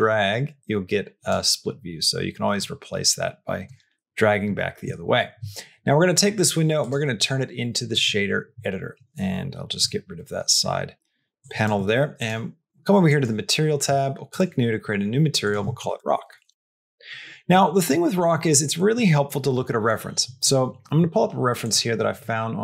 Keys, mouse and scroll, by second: 2.5-3.5 drag, 6.8-7.8 drag, 9.6 n, 11.2 click, 11.6 click, 13.0 click, 14.2 click, 15.4-17.3 shift+drag, 17.8 middle click, 18.7 middle click.